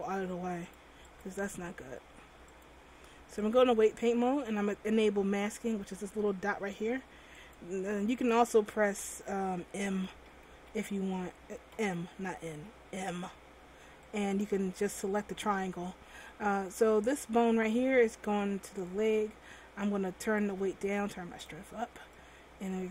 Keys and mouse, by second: 7.6-9.1 drag, 9.1 a, 10.0 n, 10.6 n, 12.0 m, 12.6 m.